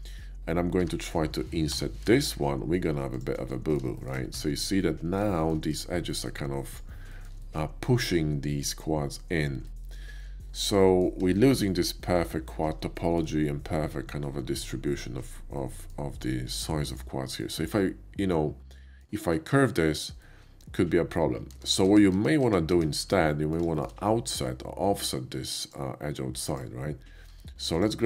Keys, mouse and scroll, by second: 0.7 a, 1.6 i, 3.2 click, 3.6 middle click, 4.0 shift+middle click, 4.4 Tab, 4.8-5.2 middle drag, 5.4 shift+middle click, 5.7 shift+click, 6.1 shift+middle click, 6.6 shift+click, 7.1 shift+middle drag, 7.4 shift+middle click, 9.7 shift+middle click, 10.1 shift+middle click, 10.5 shift+middle drag, 10.8 shift+middle click, 11.3 shift+middle drag, 13.0 shift+middle click, 15.4 shift+middle click, 16.8 click, 17.3-19.0 middle drag, 20.2 middle click, 21.9 ctrl+z, 22.3 ctrl+z, 23.2 middle click, 23.8 shift+middle click, 25.5 shift+click, 26.5 shift+click, 27.4 Tab, 27.8 click.